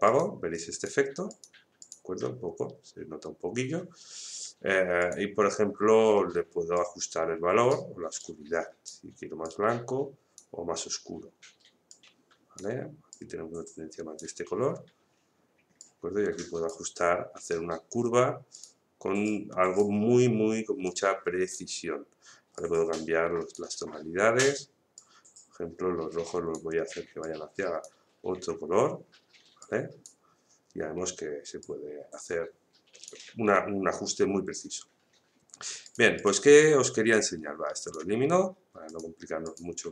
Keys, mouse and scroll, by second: 5.0-35.8 drag.